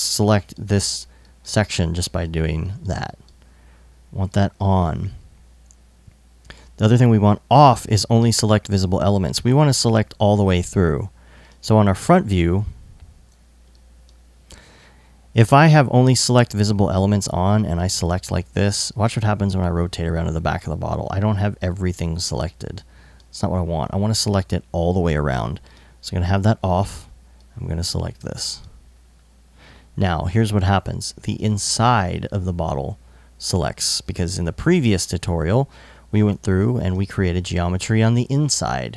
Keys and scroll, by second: 13.1 i.